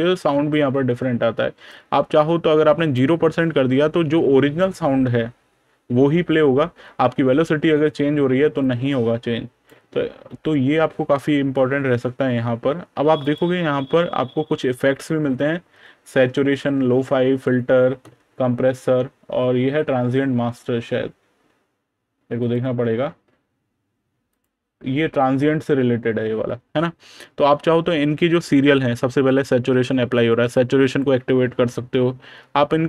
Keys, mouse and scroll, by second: 1.5 click, 8.5 click, 9.6 super+KP_Subtract, 13.1 click, 13.8 super+KP_Add, 15.1 super+KP_Add, 15.3 super+KP_Subtract, 16.0 super+KP_Add, 16.8 super+KP_Add, 22.3 click, 26.5 super+KP_Subtract, 27.0 super+KP_Add, 30.0 click.